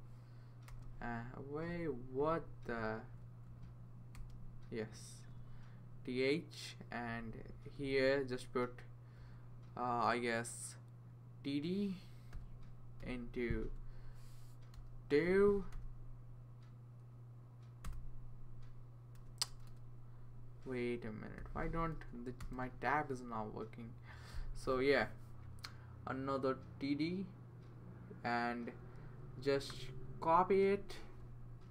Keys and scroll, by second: 0.7 Tab, 2.3 Up, 2.6 Up, 3.0 Right, 4.1 Tab, 6.9 Down, 7.2 Down, 7.8 Left, 9.2 Left, 12.3 t, 13.0 d, 14.8 *, 15.7 2, 17.8 Return, 19.2 BackSpace, 19.5 BackSpace, 19.7 BackSpace, 22.0 2, 22.4 Tab.